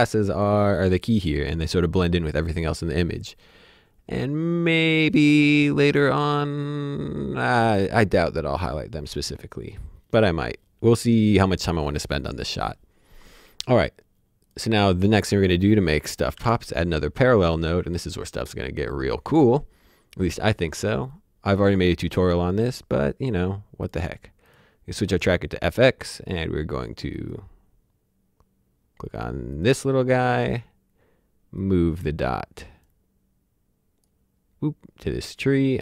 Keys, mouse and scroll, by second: 0.6 click, 14.4 click, 16.2 alt+Num_Lock, 16.3 p, 17.5 click, 23.8 click, 27.1 click, 29.1 click, 31.5 click.